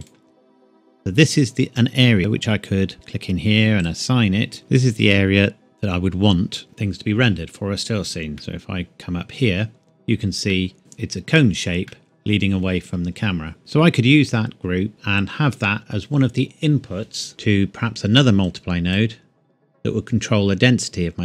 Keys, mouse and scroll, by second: 0.0 right click, 2.9 click, 8.4 Tab, 8.7 middle click, 9.6-9.9 scroll down 1, 10.5 middle click, 11.9 middle click, 13.2-13.6 scroll down 1, 13.6-14.6 scroll up 1, 14.6 scroll down 1, 14.9 middle click, 15.4-17.3 scroll up 1, 18.5 click.